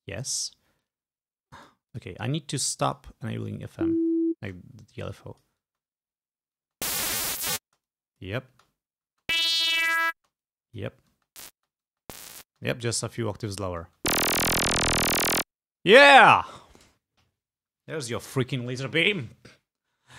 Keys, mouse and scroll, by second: 0.9-1.9 drag, 2.0 click, 3.0 click, 3.7 space, 4.9 click, 5.8 space, 6.7 space, 7.7 space, 7.9 click, 8.6 space, 10.3 space, 10.5 click, 11.3 space, 13.2 click, 13.9 space, 15.9 space.